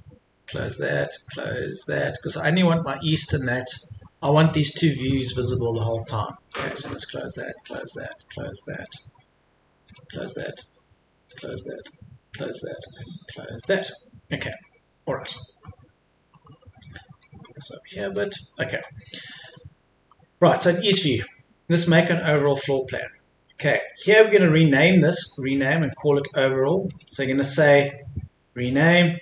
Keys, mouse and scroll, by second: 15.0-15.4 scroll up 1, 15.4 middle click, 15.8-16.4 scroll down 1, 16.4 middle click, 17.2 click, 18.6 Escape, 19.3 click, 20.1 middle click, 22.4 click, 24.6 right click, 25.8 click, 27.9 right click.